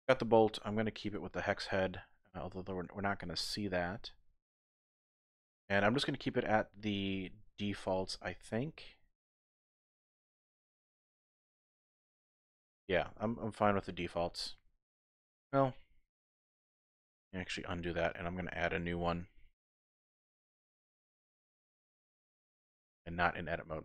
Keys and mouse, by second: 0.0-1.2 drag, 5.0 middle click, 9.6 click, 9.8 typing, 9.9-11.2 middle drag, 11.8-13.1 middle drag, 12.6 typing, 13.2 Tab, 13.8-15.5 middle drag, 15.5 click, 16.7 x, 17.5 KP_1, 19.0 shift+a, 20.7 shift+a, 22.7 Tab.